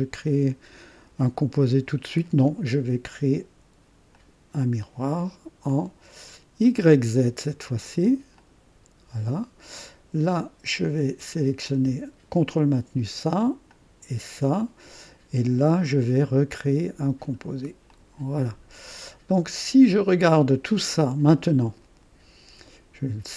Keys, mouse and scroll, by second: 4.1 click, 5.6 click, 7.0 click, 8.3 click, 12.3 ctrl+click, 13.7 ctrl+click, 17.2 click, 17.9 click, 18.6 scroll down 1, 19.3 right click.